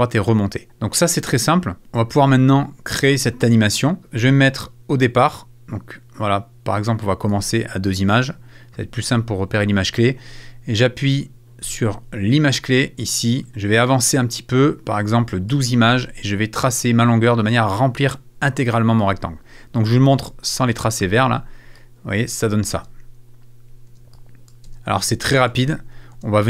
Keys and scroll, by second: 22.7 space.